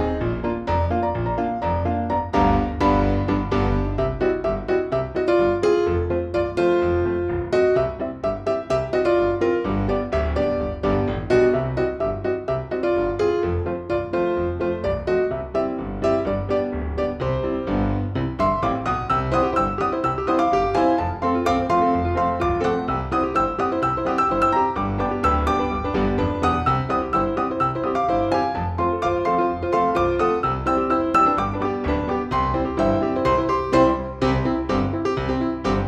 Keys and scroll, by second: 3.0 space, 4.4 shift+F2, 7.7 F3, 13.3 space, 15.4 Delete, 35.3 space, 35.5 Escape.